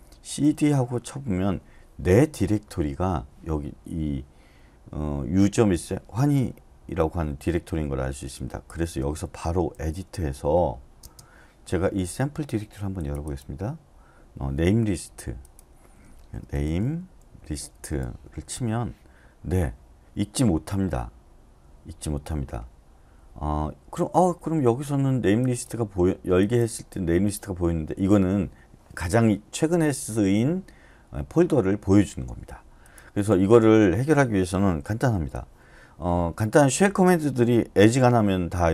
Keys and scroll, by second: 0.0-0.4 typing, 0.7 Return, 8.7-11.0 typing, 16.4-18.0 typing, 18.5 Return, 35.1 typing.